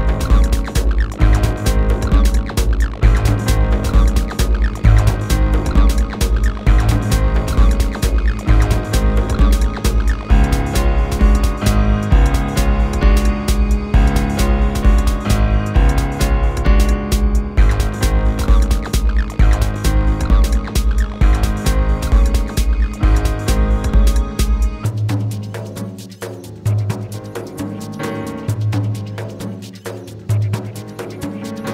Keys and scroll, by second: 5.7 ctrl+z.